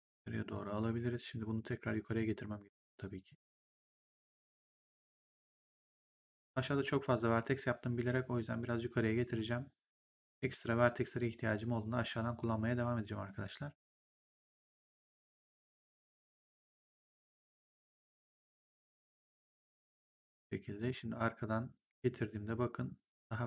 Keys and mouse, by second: 2.0 click, 3.2 click, 5.7 click, 7.4 click, 9.1 click, 13.8 click, 16.4 click, 17.5 click, 18.9 click, 22.3 click.